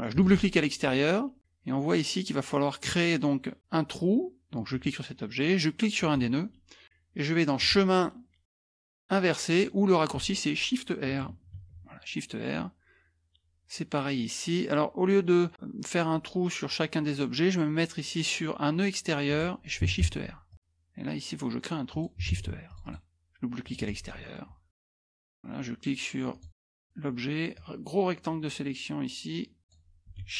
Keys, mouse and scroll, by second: 0.1 click, 4.7 click, 6.0 click, 7.6 click, 10.1 click, 11.6 shift+r, 19.3 click, 20.1 shift+r, 20.5 click, 21.9 click, 22.3 shift+r, 22.7 click, 23.6 click, 24.3 middle click, 24.3 scroll up 2, 24.3 scroll down 2, 24.5 middle click, 26.3 click, 27.5-30.1 drag.